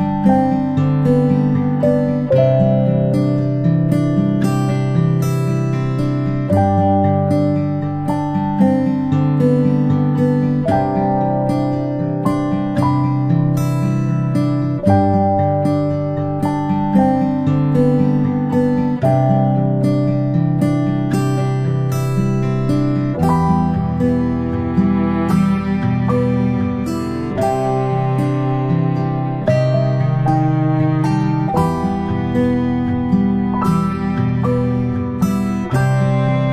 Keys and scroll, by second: 3.5-5.1 space, 13.6 ctrl+z, 31.1 a.